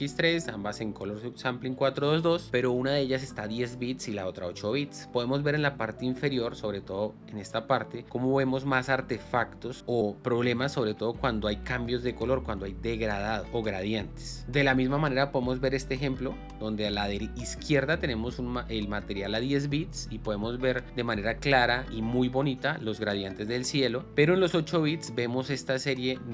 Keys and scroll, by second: 13.9 space, 14.5 space.